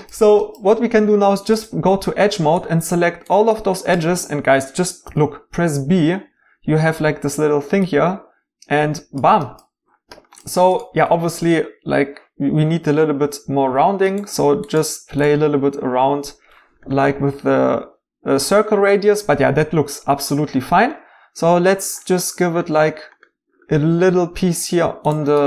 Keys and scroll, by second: 5.1 b, 7.8 b.